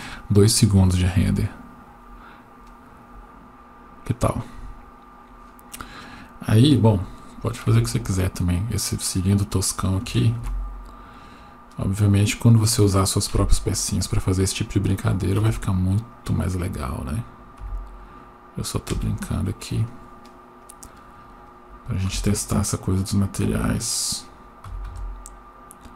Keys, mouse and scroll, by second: 7.7 Tab, 9.0 scroll up 1, 10.4 ctrl+r, 13.3 KP_1, 14.2-15.4 scroll up 2, 15.4 1, 16.1 click, 17.6 s, 19.9 click, 20.6 click, 22.1 s, 24.6 s.